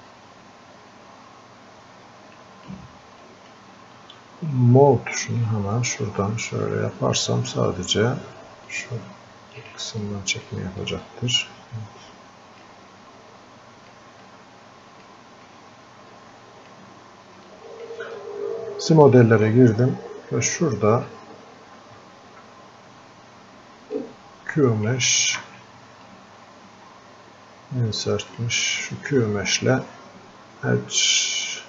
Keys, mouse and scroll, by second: 0.2-3.3 drag, 6.6-8.7 drag, 8.7-10.0 drag, 10.0 click, 10.8-13.1 drag, 13.1 click, 14.2 click, 15.5-17.5 drag, 17.5-19.4 drag, 20.2-20.6 scroll up 1, 21.3-21.7 scroll down 1, 24.0-25.4 drag, 25.4 ctrl+z, 26.2 space, 28.4 click, 28.4 space.